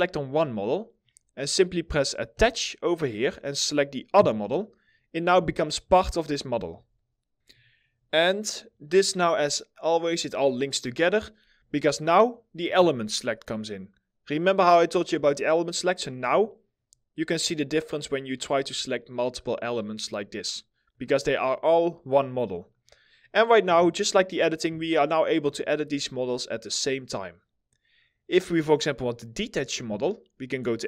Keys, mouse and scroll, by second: 5.0 w, 5.6 alt+middle click, 22.8 middle click, 23.4 1, 24.6 alt+middle click.